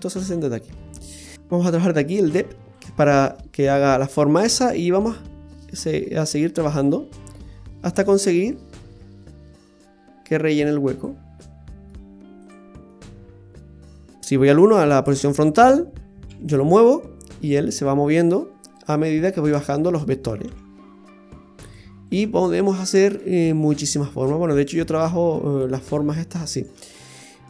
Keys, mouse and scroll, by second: 1.3 click, 2.7 click, 4.9 click, 5.5 click, 8.5 click, 8.7 click, 11.0 click, 12.9 middle click, 14.2-14.6 scroll down 5, 16.3 g, 19.4 right click, 20.4 g, 22.1 right click, 22.2 g, 24.4 right click, 24.6 g, 26.5 right click, 26.7 g.